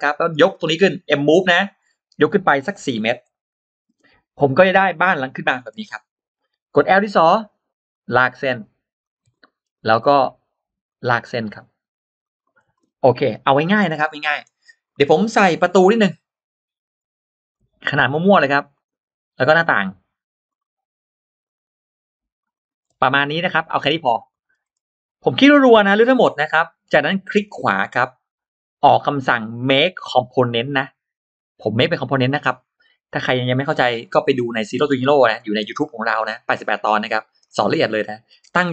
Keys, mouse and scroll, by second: 0.2 click, 4.3 scroll down 1, 5.4-5.7 scroll up 1, 6.8-7.1 scroll up 1, 7.1 l, 7.7-8.9 drag, 8.8 l, 9.2 middle click, 9.5 scroll down 1, 9.5 l, 9.8 middle click, 10.7 click, 12.0 click, 12.6-13.1 scroll down 1, 12.6 space, 12.6 l, 12.9 middle click, 13.7-14.2 scroll down 1, 13.7 space, 13.9 middle click, 14.7-15.7 scroll up 2, 16.4 scroll up 1, 17.3 click, 17.3 r, 18.6 click, 19.6 click, 19.6 r, 20.3-21.4 drag, 22.4 click, 22.7-23.6 scroll down 1, 23.0 middle click, 24.1 middle click, 24.3 scroll down 1, 24.3 space, 25.4 click, 25.6 click, 26.5-26.8 scroll up 1, 27.3 right click.